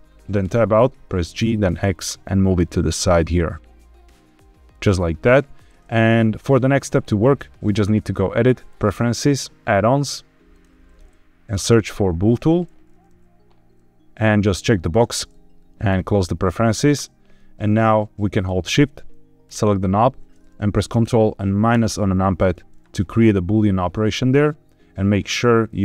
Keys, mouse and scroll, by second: 0.4 Tab, 1.3 g, 1.6 x, 5.8 click, 8.8 click, 19.4 shift+click, 21.7 ctrl+KP_Subtract, 25.6 click.